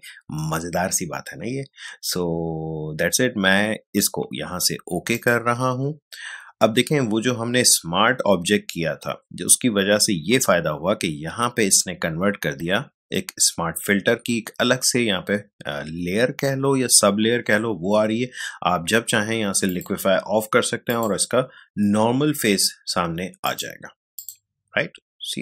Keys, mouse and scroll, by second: 5.1 click, 19.6 click, 23.4 click.